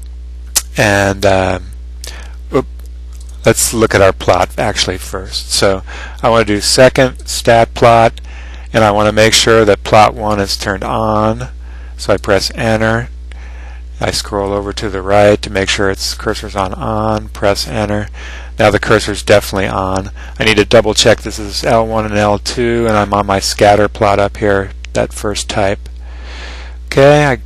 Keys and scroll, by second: 12.4 Return, 14.7 (, 17.7 Return.